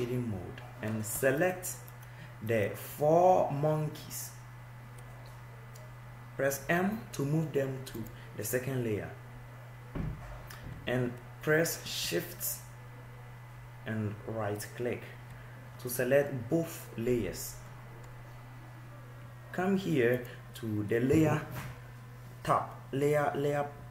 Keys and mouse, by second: 0.0 click, 3.3-5.4 drag, 7.7 m, 17.5 middle click.